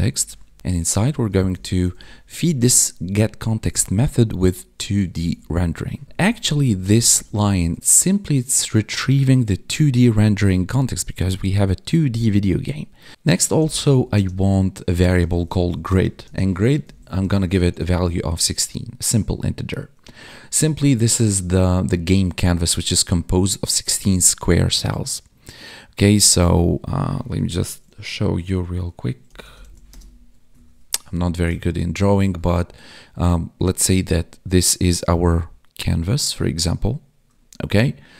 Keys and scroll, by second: 1.8 Right, 3.7 Right, 5.2 ctrl+s, 6.0 ctrl+shift+Left, 7.7 ctrl+shift+Right, 7.8 ctrl+shift+Down, 14.0 space, 15.8 space, 16.2 space, 17.9 ctrl+s.